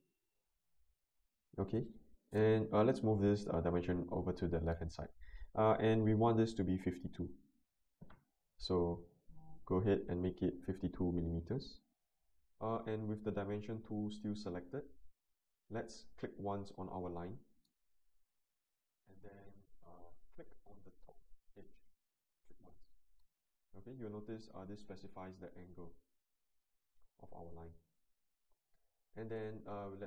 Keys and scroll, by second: 6.2-7.1 typing.